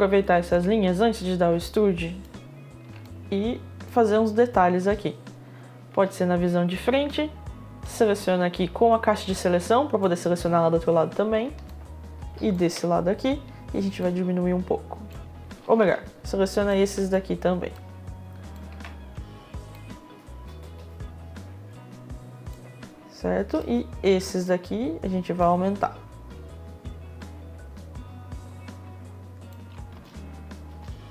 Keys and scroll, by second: 4.4 space, 7.4 space, 16.2 ctrl+z, 29.5 space.